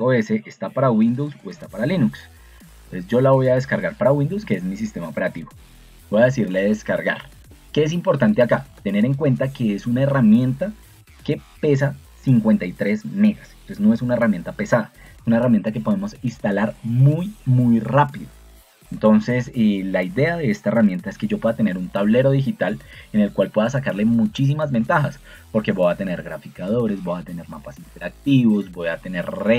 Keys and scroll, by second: 4.5 Escape.